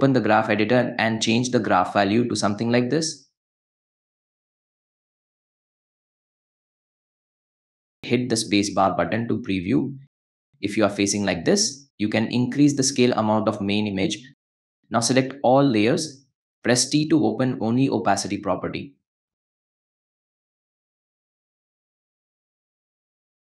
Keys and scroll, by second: 0.3 =, 8.8 space, 14.5 a, 16.9 t, 19.3 =.